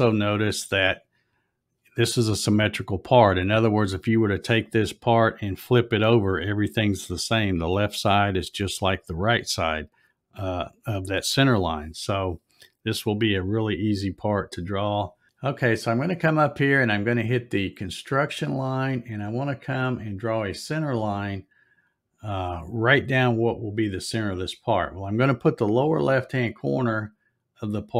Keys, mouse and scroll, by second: 18.0 click.